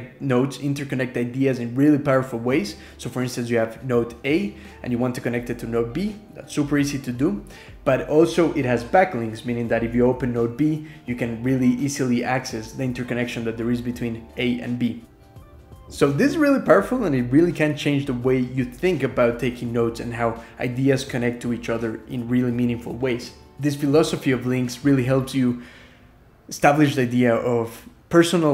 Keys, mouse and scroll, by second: 24.6 ctrl+shift+Tab, 24.7 shift+super+Up, 25.7 shift+super+Up.